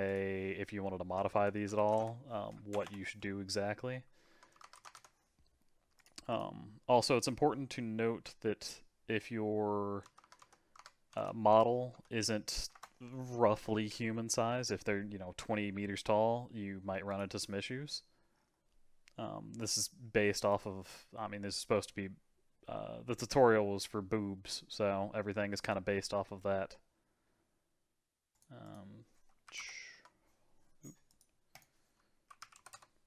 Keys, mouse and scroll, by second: 0.0-2.8 drag, 2.8 BackSpace, 6.3-9.4 drag, 13.6-17.0 scroll down 6, 17.1 click, 17.6-20.5 scroll down 5, 20.5-23.6 drag, 28.6-31.2 drag, 31.5-32.7 drag, 32.7 KP_0.